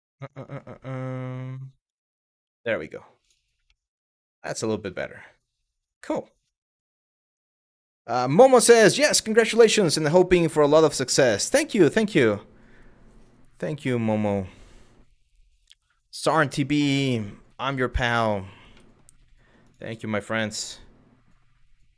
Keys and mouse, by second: 1.2-2.2 right drag, 2.2 middle click, 3.4-4.0 middle drag, 4.5-5.0 middle drag, 18.5 middle drag, 20.0-20.3 middle drag.